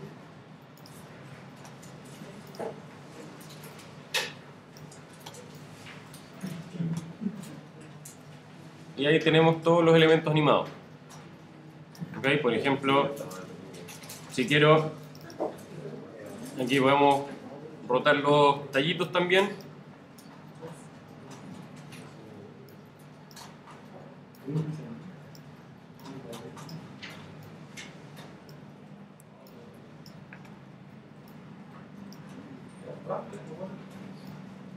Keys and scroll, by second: 21.6 alt+shift+super+r, 30.5 super+c, 32.3 super+v.